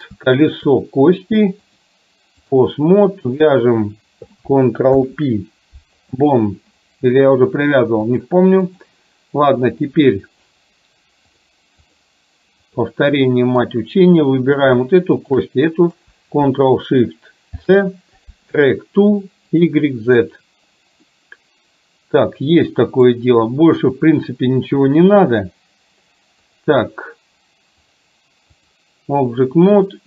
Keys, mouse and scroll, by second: 0.6 shift+click, 1.7-2.7 drag, 3.5 click, 5.0 ctrl+p, 8.2 click, 9.7 click, 12.0 click, 13.1-13.7 middle drag, 14.2 click, 15.2 shift+click, 19.6 drag, 20.2 ctrl+shift+click, 21.1-23.2 middle drag, 28.0-28.7 drag.